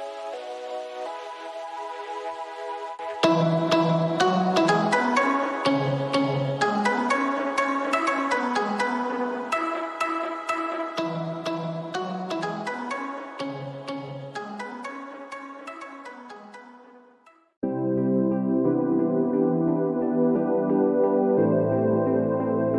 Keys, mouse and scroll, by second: 0.2 scroll down 2, 1.3 alt+scroll up 1, 1.4 click, 6.8 alt+scroll down 1, 7.0 alt+scroll up 1, 7.2 ctrl+s, 8.5 alt+scroll up 2, 8.8 alt+scroll down 1, 9.0 click, 9.0 space, 9.1 space, 9.3 alt+scroll up 1, 9.6 click, 10.6 click, 10.9 ctrl+s, 11.3 click, 11.7 click, 11.8 scroll down 1, 12.0 click, 12.4 click, 14.6 ctrl+z, 15.1 click, 15.1 shift+click, 17.2 shift+click, 17.6 shift+click, 18.0 shift+scroll down 1, 18.1 shift+click, 19.1 shift+scroll up 1, 19.3 click, 19.4 shift+click, 20.5 shift+click, 21.4 shift+scroll down 1, 21.4 shift+scroll up 1, 21.5 shift+scroll down 1, 21.7 shift+space, 21.9 shift+click.